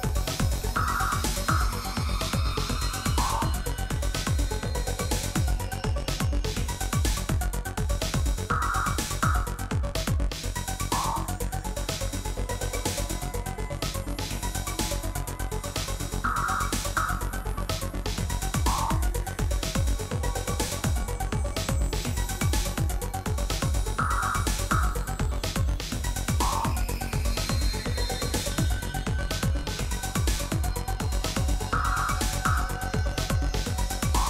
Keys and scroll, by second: 0.1 Tab, 1.0 a, 2.3 s, 6.6 Tab, 7.1 alt+a, 11.3 Tab, 12.7 1, 14.1 1, 14.9 shift+z, 17.1 g, 18.9 x, 22.2 shift+z, 23.6 Tab, 24.0 alt+a.